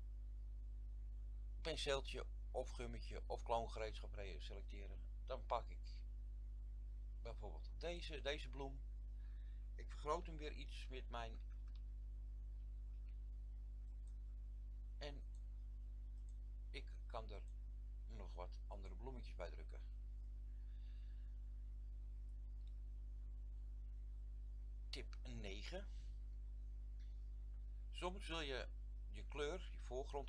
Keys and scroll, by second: 10.4-12.9 typing.